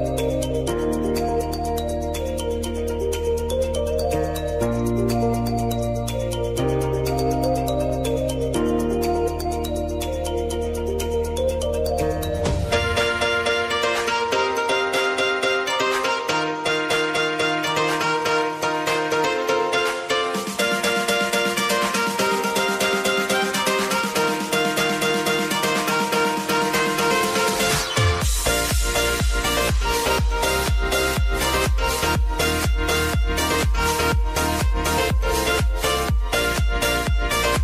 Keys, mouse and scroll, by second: 1.7 ctrl+a, 2.0 click, 4.2 c, 5.6 v, 6.1-12.5 drag, 12.5 Left, 15.5-19.8 drag, 19.8 Left, 21.7-25.2 drag, 25.2 Left, 27.4 click, 28.5-34.9 drag, 34.9 Left, 36.0-37.6 drag.